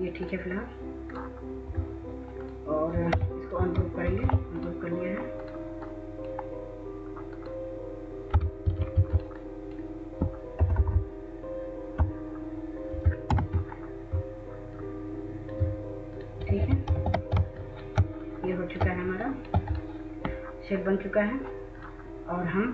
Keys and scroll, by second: 3.1 w, 10.6 ctrl+shift+Right, 10.7 ctrl+shift+Right, 11.3-11.7 ctrl+shift+Right, 13.0 ctrl+-, 16.2-16.8 typing.